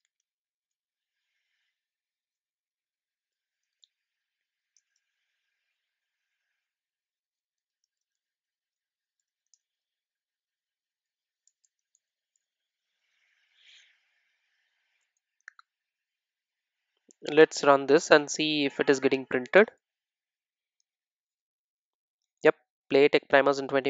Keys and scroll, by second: 2.0 super+d, 12.4 Return, 13.7 super+s.